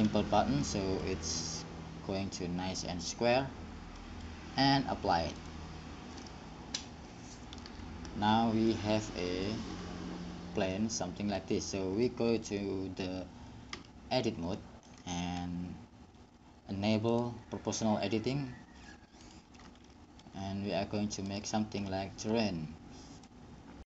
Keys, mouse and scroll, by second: 0.9-5.6 middle drag, 5.6 click, 13.9 Tab, 14.7 click, 17.3-20.1 drag, 21.5-23.8 middle drag, 23.8 click.